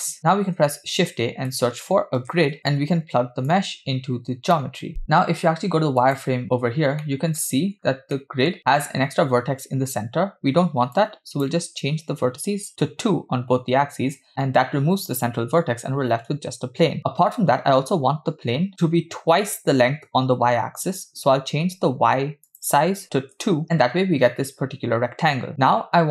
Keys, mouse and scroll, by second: 0.4 shift+a, 3.5-4.6 drag, 6.1 click, 7.0-7.4 middle drag, 7.4-8.1 scroll up 5, 8.1 middle click, 11.0-12.9 shift+drag, 17.0-18.0 scroll down 1, 22.5-24.5 drag.